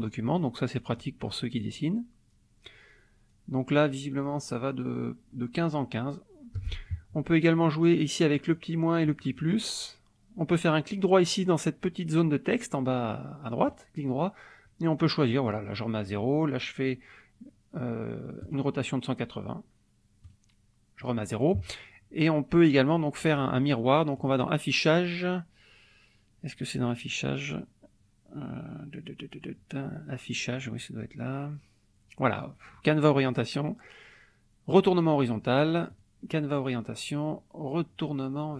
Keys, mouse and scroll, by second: 0.3-1.2 ctrl+shift+scroll down 4, 1.7 ctrl+shift+scroll down 2, 2.3-2.9 ctrl+shift+scroll down 2, 2.9 ctrl+shift+scroll up 1, 3.3-3.6 ctrl+shift+scroll down 1, 3.8-4.2 ctrl+shift+scroll up 1, 4.2-4.6 ctrl+shift+scroll down 1, 5.3-5.9 ctrl+shift+scroll up 2, 6.1-6.7 ctrl+shift+scroll down 1, 8.3 click, 9.0 click, 9.7-13.7 middle drag, 13.7 right click, 15.4 click, 16.0 right click, 18.5 click, 20.2 right click, 21.1 click, 24.2 click, 34.6 click, 35.9 click.